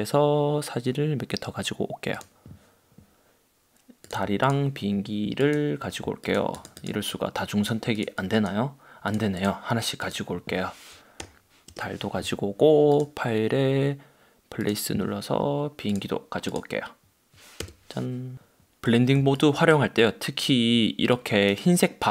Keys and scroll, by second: 11.3 \, 11.8 Return, 17.7 Return.